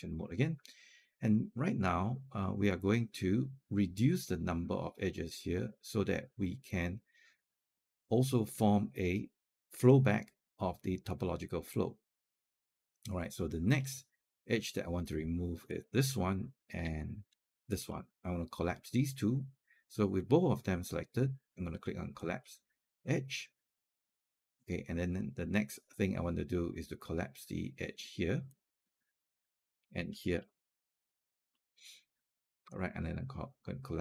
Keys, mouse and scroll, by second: 15.5 click, 17.5 shift+click, 22.0 click, 28.3-30.2 drag, 30.8 shift+click, 33.8 click.